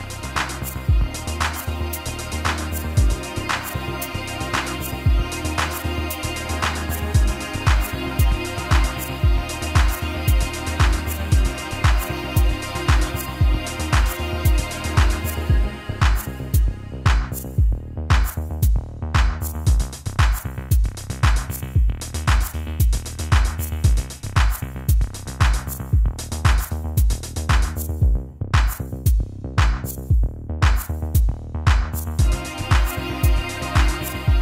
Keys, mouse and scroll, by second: 4.8 click, 9.4-10.3 shift+middle drag, 10.9-11.6 middle drag, 11.7-12.1 shift+middle drag, 13.3-15.3 drag, 16.5-17.7 middle drag, 18.8 shift+middle click, 19.6 middle click, 21.2-22.5 middle drag, 25.0 shift+click, 29.8 shift+click, 31.8-32.5 middle drag, 33.2-33.6 shift+middle drag.